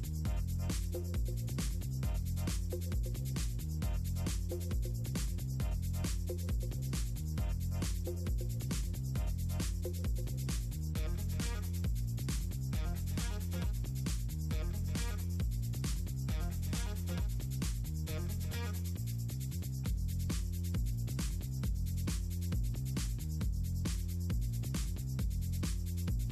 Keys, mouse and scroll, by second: 0.3 ctrl+click, 1.1 click, 1.4 click, 3.1 click, 3.6 ctrl+scroll up 2, 3.9 click, 4.3-4.8 drag, 4.9 middle click, 5.1 ctrl+c, 5.4 click, 6.0 click, 6.2 middle click, 6.4 middle click, 6.6 middle click, 6.8 click, 8.0 drag, 8.5 click, 9.0 middle click, 10.0 ctrl+scroll up 2, 10.4 middle click, 10.5 drag, 10.9 click, 11.8 8, 11.8 KP_Enter, 12.0 click, 12.2 middle click, 12.7 click, 12.9 KP_Enter, 13.2 middle click, 13.4 click, 13.7 8, 13.9 middle click, 14.4 click, 14.6 KP_Enter, 14.7 middle click, 15.0 click, 15.2 KP_Enter, 15.3 middle click, 15.5 click, 15.9 KP_Enter, 16.0 middle click, 16.4 KP_Enter, 16.7 middle click, 16.8 middle click, 17.3 middle click, 17.5 click, 18.1 middle click, 18.5 middle click, 19.1 click, 19.5 click, 20.1 click, 21.3 middle click, 21.8-22.5 shift+drag, 22.8 click, 23.4 click, 23.6 click, 23.8 click, 24.2 middle drag, 24.4 scroll up 2, 24.8 ctrl+Up, 25.9 KP_Enter, 26.1 click.